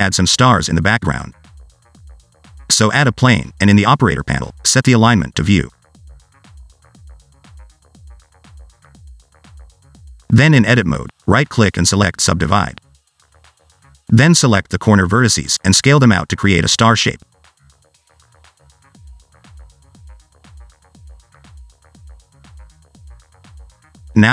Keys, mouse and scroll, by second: 0.1-0.4 scroll up 2, 1.0 shift+right click, 1.3 shift+a, 2.8-3.6 scroll down 1, 5.1 click, 5.7 click, 7.1 click, 7.9 s, 8.3-8.7 scroll down 1, 8.7 middle click, 9.6 Tab, 10.7-11.2 scroll up 3, 11.2 shift+middle click, 11.4-11.9 scroll up 1, 11.9 right click, 15.1 click, 15.8 shift+click, 16.2 shift+click, 16.6 shift+click, 17.1 s, 17.6 Tab, 17.9 r, 19.2 alt+s, 19.4 alt+d, 19.8 s, 20.3 alt+d, 21.0 s, 21.4 click, 23.0 shift+right click, 23.6 shift+a.